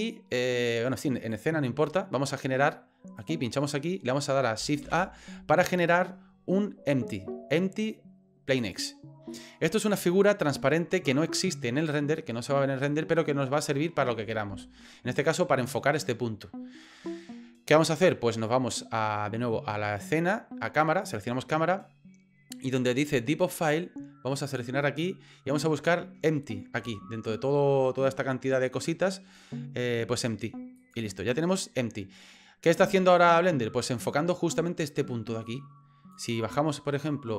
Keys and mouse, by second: 1.3 click, 4.8 shift+a, 9.3 middle click, 12.2 middle click, 20.1 click, 21.0 click, 24.5-30.9 drag, 34.1 middle click, 36.1-37.3 drag.